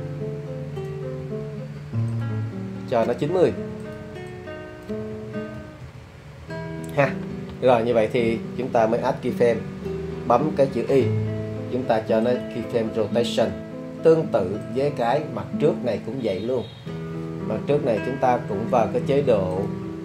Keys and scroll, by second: 5.6 9, 5.8 0, 6.4 Return, 11.2 i.